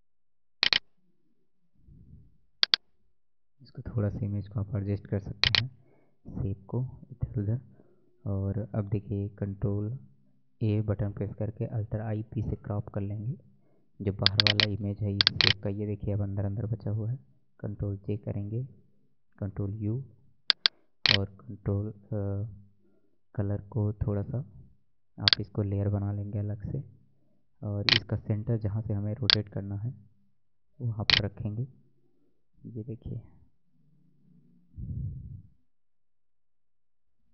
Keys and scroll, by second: 10.5 ctrl+a, 12.1 alt+i, 12.4 alt+p, 17.7 ctrl+j, 19.1 ctrl+u, 34.5 ctrl+j, 37.2 ctrl+u.